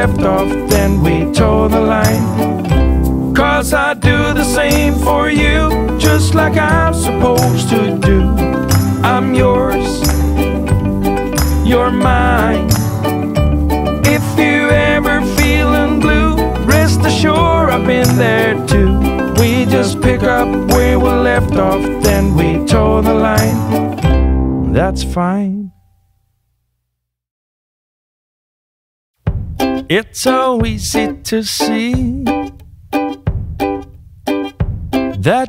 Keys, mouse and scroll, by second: 5.5 click, 10.8 click, 14.8 click, 16.1 click, 19.4 click, 21.3 click, 23.9 click, 26.3 right click, 27.4 right click, 27.5 click, 29.5 click, 31.0 click, 32.1 click, 33.4 click.